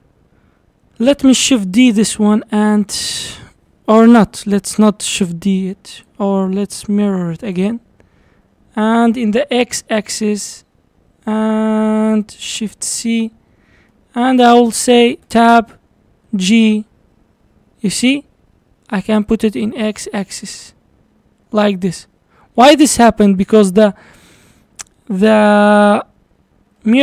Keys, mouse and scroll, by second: 1.5 shift+d, 4.9 ctrl+z, 7.6-9.0 drag, 12.7 shift+c, 13.5 scroll down 4, 13.9-15.3 middle drag, 15.3 Tab, 16.3 g, 23.7-24.7 scroll up 1, 24.7-26.8 scroll up 5, 26.8-27.0 shift+middle drag.